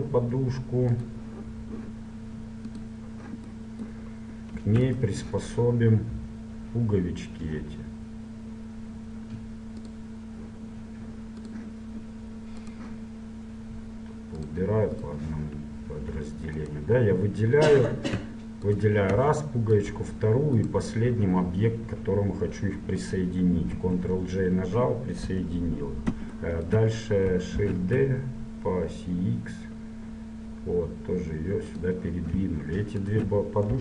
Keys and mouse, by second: 1.6-4.6 drag, 4.6 middle click, 5.0-6.9 right drag, 9.9-13.2 drag, 12.7 middle click, 13.6 click, 13.9 right click, 14.5 middle click, 14.7-16.8 drag, 15.9-17.1 middle drag, 17.1-18.7 right drag, 18.7 middle click, 18.9-22.5 right drag, 23.7 ctrl+j, 25.4 KP_1, 26.0 middle click, 27.7 shift+d, 33.2 right click.